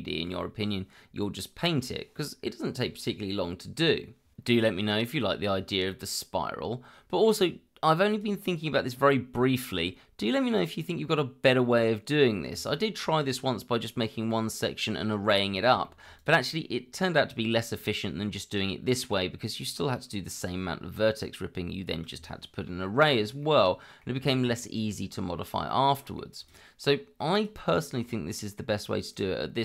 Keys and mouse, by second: 8.2-11.1 middle drag, 11.5 click, 11.9 shift+middle drag, 12.7 click, 14.4-14.9 middle drag, 15.1 click, 15.9 shift+middle drag, 17.6 shift+middle drag, 19.3-23.0 middle drag, 23.7 shift+middle drag, 24.2-27.6 middle drag, 28.5-29.0 middle drag.